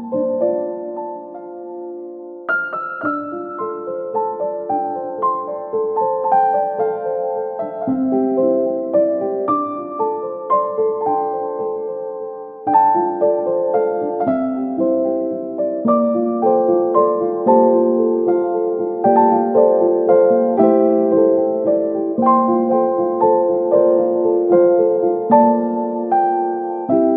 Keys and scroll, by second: 3.0 Delete, 5.8 ctrl+r, 8.3 Escape, 12.8 space, 17.7 ctrl+g, 18.4 c, 25.3 space.